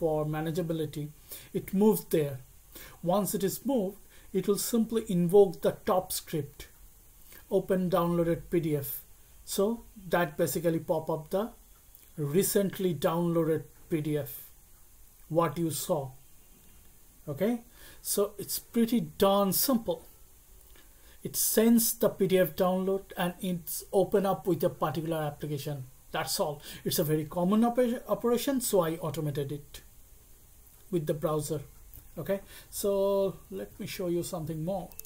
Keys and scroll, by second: 33.5 alt+Tab.